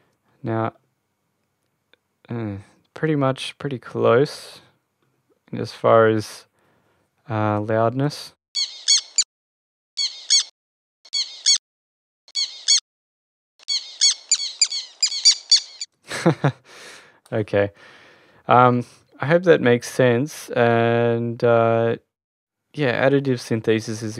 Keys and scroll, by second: 8.1 Return, 8.3 space, 9.2 Return, 9.8 space, 10.6 Return, 10.9 space, 11.9 Return, 12.2 space, 13.2 Return, 13.4 space, 15.6 space.